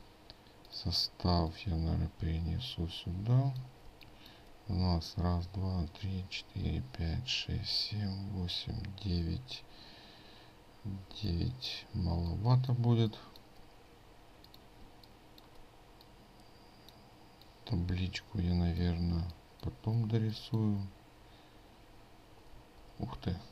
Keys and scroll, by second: 22.6 ctrl+z.